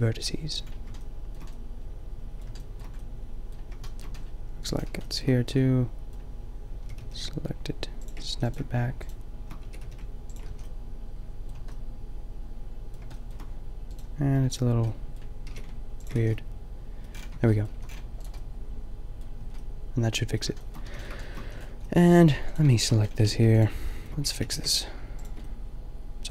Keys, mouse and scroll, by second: 3.9 middle click, 4.7 click, 5.7 click, 6.8 g, 8.3 a, 9.7 g, 10.4 a, 15.5 g, 16.1 a, 17.3 Tab, 17.7 a, 19.5 Tab, 20.9 a, 21.5 a, 23.3 x, 24.5 g, 25.3-26.3 drag.